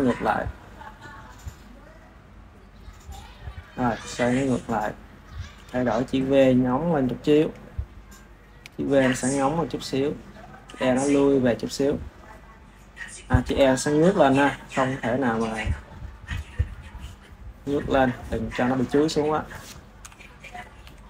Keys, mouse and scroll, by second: 4.4 click, 5.5 g, 7.7-9.1 ctrl+middle drag, 9.1 g, 9.9 click, 10.6 g, 11.6 drag, 13.0 click, 13.4 KP_1, 14.1 r, 16.5 r, 16.6 r, 18.9 r, 20.0 KP_7, 20.8 r.